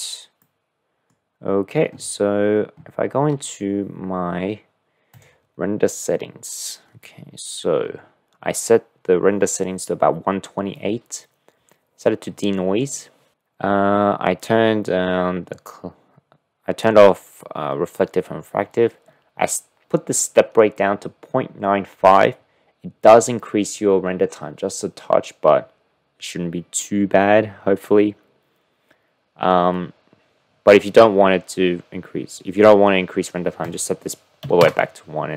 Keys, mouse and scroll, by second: 0.4-1.2 drag, 5.1 drag, 33.6-35.3 drag, 34.6 KP_Decimal.